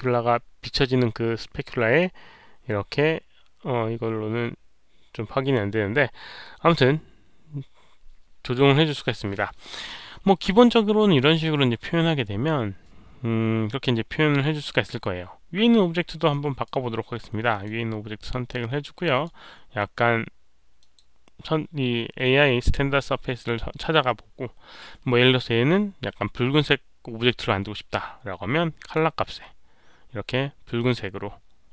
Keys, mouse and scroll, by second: 1.9-5.5 drag, 16.2-16.6 drag, 17.4 click, 18.7-19.2 drag, 20.7 click, 27.1 click, 28.7 click, 30.7 click.